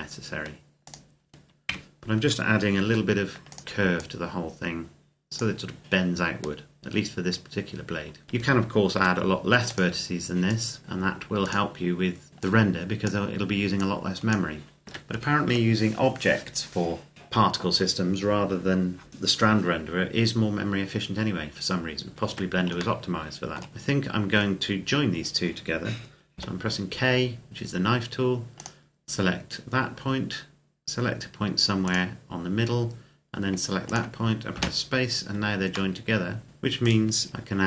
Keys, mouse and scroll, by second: 0.6 click, 1.5 ctrl+KP_Add, 2.6 r, 3.3 click, 8.2 ctrl+KP_Add, 8.7 r, 9.4 click, 10.8 r, 11.2 click, 14.7 Tab, 22.1 Tab, 22.8 shift+middle click, 23.6 scroll up 1, 23.7 middle click, 24.4-26.1 scroll up 1, 26.1 k, 28.3 click, 31.6 click, 34.4 space, 35.8 middle click, 36.6 right click, 37.2 KP_Decimal, 37.5 middle click.